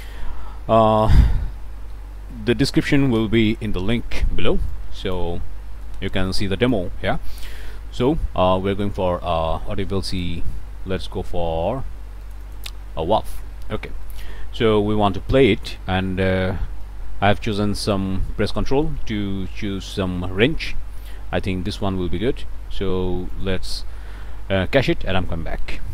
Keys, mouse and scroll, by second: 1.2-2.4 typing, 2.6 Down, 3.2 Return, 4.1-5.6 drag, 5.7-6.0 scroll down 1, 6.2 click, 7.3 scroll down 1, 7.3 click, 10.1 click, 12.2 click, 14.0 click, 16.8-20.1 ctrl+drag, 20.7-21.9 ctrl+drag, 23.3 click.